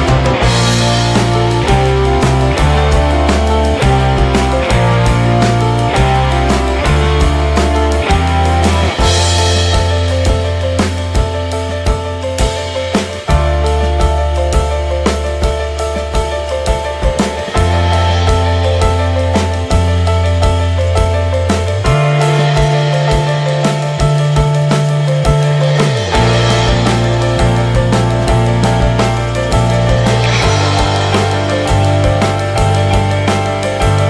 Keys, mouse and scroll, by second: 3.3 drag, 3.7 middle click, 4.1 ctrl+s, 4.4 middle click, 4.6 n, 5.3 a, 5.5 x, 6.1-6.7 shift+middle drag, 6.7 ctrl+s, 7.0 shift+a, 8.5 click, 8.8 alt+middle drag, 9.3 scroll up 1, 9.5 Tab, 9.9 alt+z, 10.1 scroll up 2, 10.4 shift+middle click, 11.1 4, 11.3 click, 12.1 middle click, 12.2 3, 12.5 click, 12.9 alt+middle click, 13.2 alt+z, 13.4 alt+middle click, 14.0 scroll up 1, 14.3 alt+z, 14.6 shift+middle click, 14.8-15.1 scroll up 1, 15.4 e, 17.8 shift+middle click, 18.3-19.5 scroll up 5, 18.6 shift+middle click, 19.5 shift+middle click, 19.6-20.2 scroll up 4, 20.2-21.2 shift+middle drag, 21.2 g, 22.9-23.3 scroll down 8, 23.3 shift+middle click, 23.7 ctrl+z, 24.0 shift+middle click, 24.2-26.7 scroll up 17, 24.6 shift+middle click, 25.1 shift+middle click, 25.6 shift+middle click, 26.7 g, 30.5-31.6 scroll down 21, 31.2 shift+middle click, 31.6 middle click, 31.8 alt+z, 32.1 Tab, 32.2 click, 32.5 shift+middle click, 33.0 ctrl+s, 33.2 shift+middle click, 33.4 Tab, 33.7 shift+middle click.